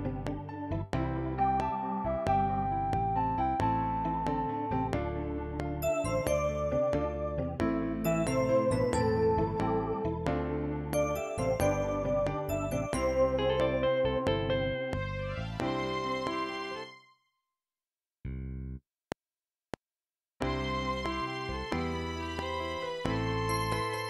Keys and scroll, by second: 16.8 space, 19.0 F7.